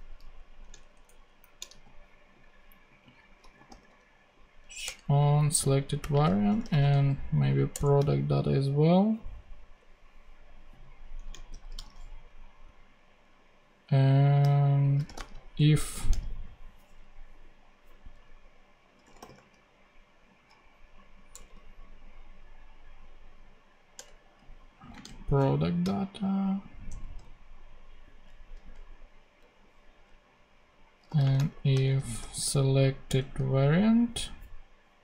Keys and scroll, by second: 0.1 super+Left, 0.6 shift+super+Left, 0.7 shift+super+Down, 1.5 shift+super+Down, 1.6 shift+super+d, 2.6 super+d, 3.0-4.1 typing, 4.8 Return, 5.7-7.1 typing, 7.6 Return, 11.4 shift+super+Left, 14.7-15.8 typing, 18.7-19.7 typing, 21.2 BackSpace, 23.9 Return, 24.6 Right, 24.9 space, 25.3 shift+[, 26.8 Return, 30.9-32.6 typing, 33.0 Return.